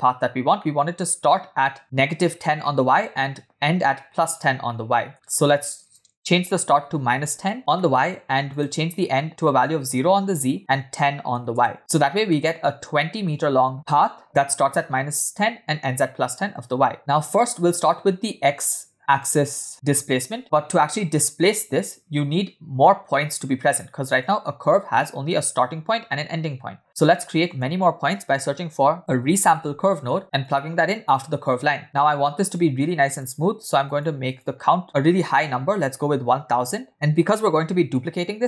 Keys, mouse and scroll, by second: 0.1-0.4 scroll down 1, 0.6 shift+middle click, 4.7 middle click, 5.2-5.8 scroll up 1, 5.8 scroll up 3, 5.8-7.4 drag, 7.8 middle click, 8.5-9.9 drag, 10.6 click, 12.0 scroll down 3, 12.3-12.9 middle drag, 17.0-17.5 middle drag, 17.6-18.4 scroll down 1, 20.4 middle click, 20.4 scroll down 1, 20.5-22.4 scroll up 1, 22.4 scroll up 1, 24.2 click, 26.8 shift+a, 31.6 click, 33.1 click, 33.9 click, 34.2-38.4 drag, 35.2 0, 35.4 0.